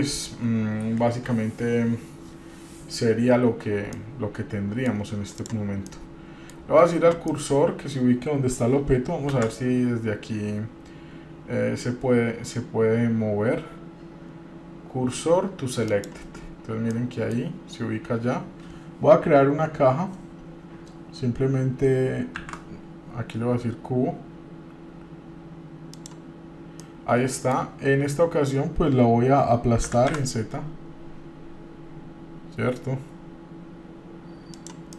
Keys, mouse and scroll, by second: 4.1-5.1 middle drag, 5.6 click, 6.1-6.7 middle drag, 7.5 middle click, 9.5 shift+s, 17.2-17.6 middle drag, 22.6 shift+a, 27.0 middle click, 30.1 s.